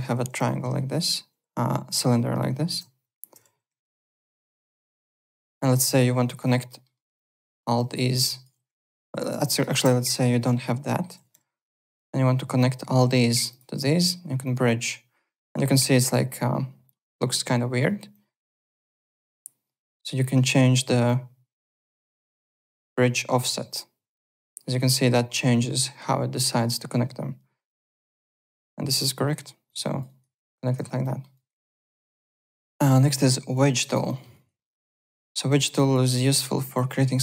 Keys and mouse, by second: 0.0-1.6 typing, 1.9 click, 2.7 ctrl+3, 3.0 Delete, 3.7 2, 4.0 click, 4.6 shift+click, 5.0 alt+middle click, 5.1 alt+right click, 5.3 alt+click, 5.5 alt+middle click, 5.9 2, 6.2 click, 6.6 alt+middle click, 7.1 alt+click, 7.9 alt+middle click, 8.2 alt+click, 8.5-9.3 typing, 9.2 click, 9.5 shift+click, 10.0 Delete, 10.8 middle click, 10.9-11.8 typing, 11.6 click, 13.4 click, 14.4 click, 18.1 click, 21.0 click, 23.3 click, 24.1 click, 28.2 alt+click, 29.6 alt+click, 30.0 alt+right click, 30.4 w, 31.0 alt+middle click, 31.3 alt+right click, 31.8 alt+Tab, 32.4 alt+click, 33.4 click, 33.8 alt+click, 34.0 alt+middle click, 34.3 alt+right click, 34.6 alt+middle click, 34.8 alt+right click, 35.1 alt+middle click, 35.7 alt+click, 36.0 alt+right click, 36.7 alt+click.